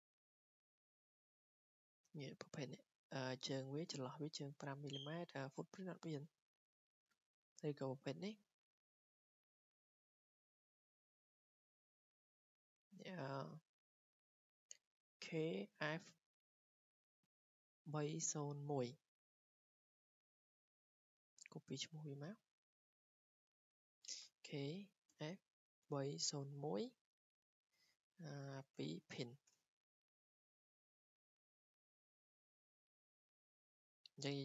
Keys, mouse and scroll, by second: 0.0-5.0 drag, 6.6-8.9 drag, 10.2 click, 11.5 click, 12.4 click, 16.7 click, 22.4-23.5 drag, 24.2-26.8 typing, 28.2-29.2 typing, 28.4 click, 29.5 Return, 30.8 typing, 32.2 click, 32.9 click.